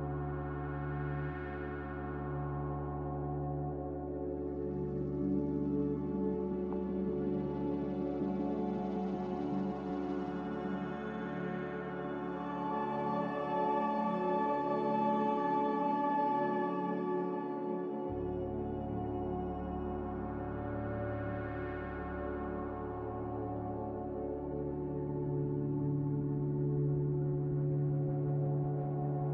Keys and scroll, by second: 2.9 typing, 3.3 Return, 5.3-6.0 typing, 7.0 Escape, 9.3 typing, 11.1-12.1 typing, 13.3-15.7 typing, 18.7 Return, 18.7 Escape, 18.7 1, 18.7 5, 18.9 Escape, 21.7 `, 21.8 Escape, 22.6 Escape, 24.0 1, 24.1 0, 24.3 Return, 25.7 1, 25.9 5, 26.0 Return, 27.0-29.3 typing.